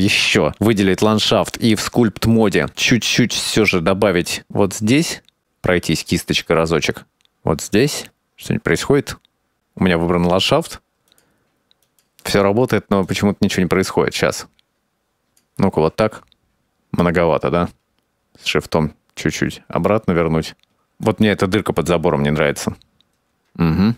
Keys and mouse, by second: 1.2-2.4 drag, 4.3-6.3 drag, 7.7-9.4 drag, 9.9 click, 10.2 click, 10.5 click, 11.2 ctrl+z, 11.2 click, 11.6 click, 13.3 click, 13.5 shift+middle click, 14.0 click, 14.5 click, 15.2 click, 16.2 click, 17.7-20.7 shift+drag, 21.1 click, 22.2 click.